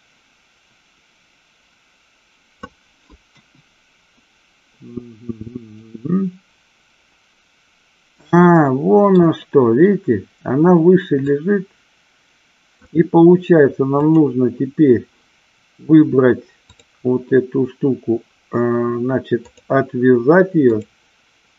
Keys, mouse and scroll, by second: 3.4 KP_1, 5.9-9.3 middle drag, 11.3-13.0 drag, 14.1 click, 16.7 click.